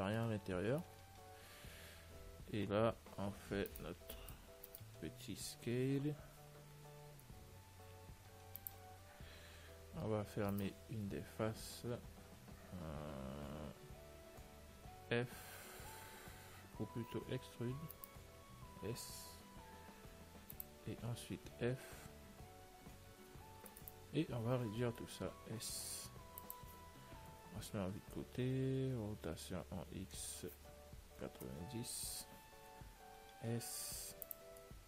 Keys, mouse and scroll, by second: 4.0-6.3 right drag, 6.3 l, 9.5-10.8 middle drag, 10.8-12.6 right drag, 17.7 e, 18.9 s, 21.4 f, 24.0-25.9 right drag, 24.2 l, 28.8 middle click, 33.5 s.